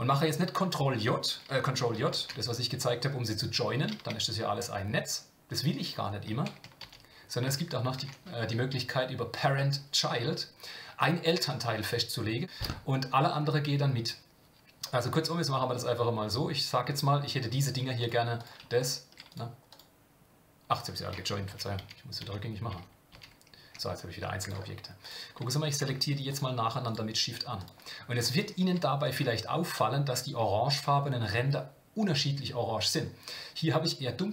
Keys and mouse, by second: 2.1 ctrl+j, 4.0 Tab, 6.1 Tab, 6.8 ctrl+z, 15.8 middle click, 18.0 click, 18.4 click, 18.8 shift+click, 19.3 click, 19.7 click, 21.4 ctrl+z, 26.3 shift+click, 26.8 shift+click.